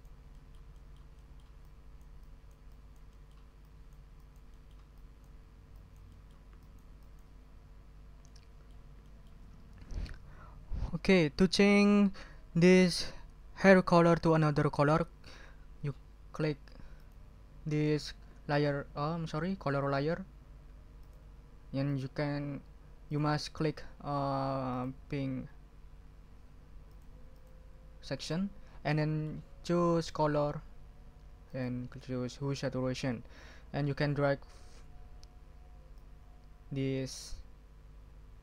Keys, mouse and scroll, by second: 0.3-1.7 scroll up 10, 0.5 click, 1.3 ctrl+drag, 1.7-2.2 ctrl+drag, 3.1 click, 3.6-4.1 drag, 4.2-4.5 drag, 4.5 middle click, 4.6 click, 4.7 middle click, 4.8 double click, 5.7-6.5 drag, 6.6 click, 7.2 ctrl+click, 7.3-8.0 ctrl+scroll down 4, 8.2 ctrl+click, 9.0 ctrl+click, 17.0 click, 21.0 click, 21.8 click, 23.0 click, 24.7 click, 26.9 click, 27.3 click, 28.2 click, 29.0 click, 30.0 click, 31.5 click, 35.9-38.4 drag.